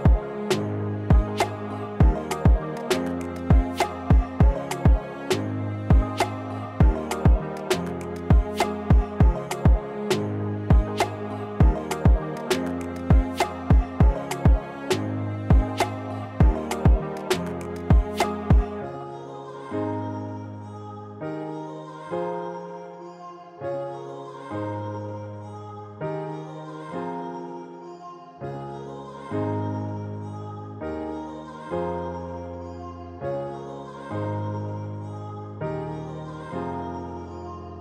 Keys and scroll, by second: 6.9 2, 7.3 s, 12.8 s, 15.5 s, 22.8 4, 23.5 s, 25.6 s, 28.9 ctrl+z, 29.2 ctrl+z, 29.7 s, 31.2 3, 32.5 4, 32.8 s.